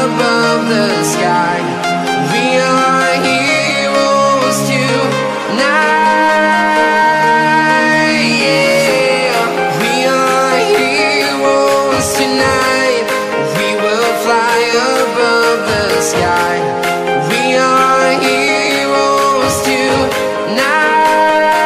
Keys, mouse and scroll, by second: 0.9 Return, 1.9 click, 4.2 click, 5.5 Delete, 7.0 click, 12.3 click, 16.7 Return, 17.5 click, 20.9-21.4 scroll up 1.